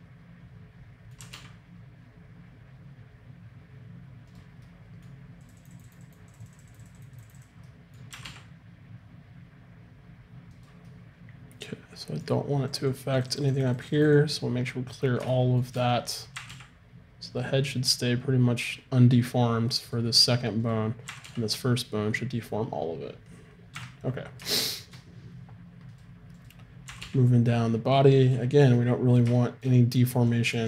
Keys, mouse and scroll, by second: 1.2 r, 6.0-10.5 drag, 8.1 r, 10.9-12.7 middle drag, 12.7-15.8 drag, 15.8 middle click, 16.4 r, 20.7-22.2 right drag, 21.1 r, 25.9-27.5 right drag, 26.9 r, 30.3-30.6 drag.